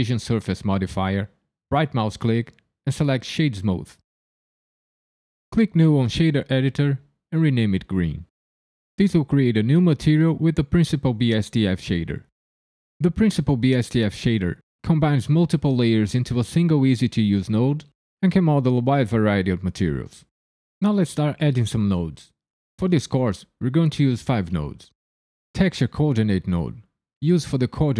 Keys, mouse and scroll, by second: 1.7 right click, 4.8 click, 5.7 click, 6.3 click, 7.4 e, 25.8 middle click.